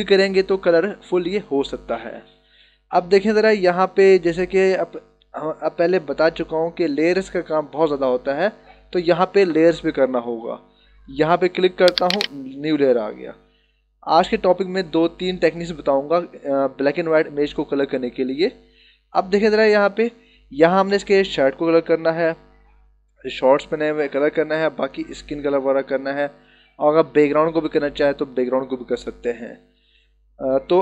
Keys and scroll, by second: 3.4 ctrl+-, 4.0 ctrl+=.